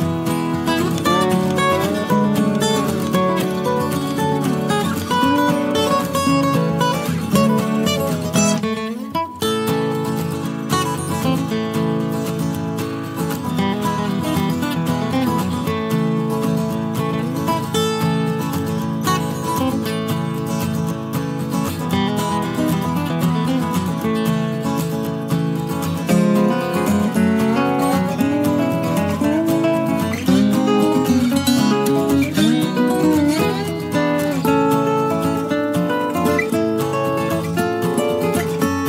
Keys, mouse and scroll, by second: 3.6 KP_Add, 11.0 click, 14.2 click, 15.4 click, 17.5 click, 18.0-19.7 drag, 22.8 KP_Add, 24.4 space, 24.6 click, 26.2 space, 28.3 scroll up 2, 29.7 KP_Add, 31.7-33.0 drag, 34.8-38.8 drag.